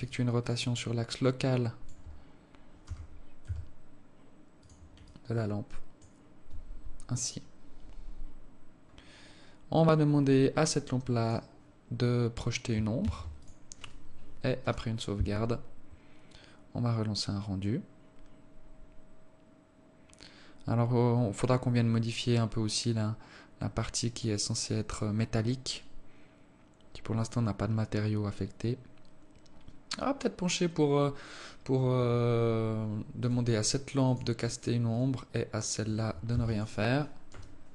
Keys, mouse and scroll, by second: 0.4 alt+click, 1.1 alt+click, 3.2 g, 5.4 alt+click, 11.6 click, 12.3-13.1 scroll up 3, 13.4 ctrl+s, 32.1 Escape, 32.8-33.6 scroll down 3, 33.6 right click, 34.4 click, 35.3 right click, 36.2 click, 36.7 ctrl+s.